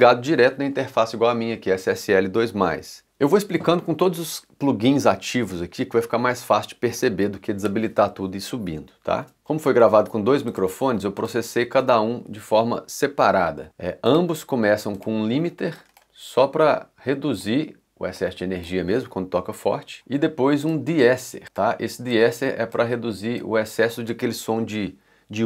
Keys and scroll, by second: 11.8 x, 19.9 c.